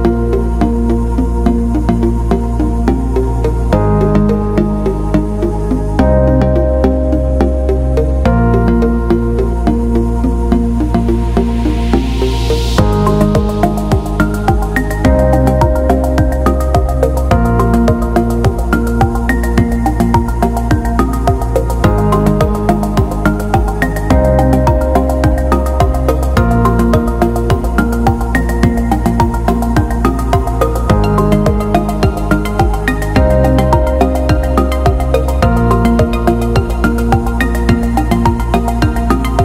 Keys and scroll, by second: 5.3 ctrl+z, 6.2 ctrl+=, 19.9 ctrl+0.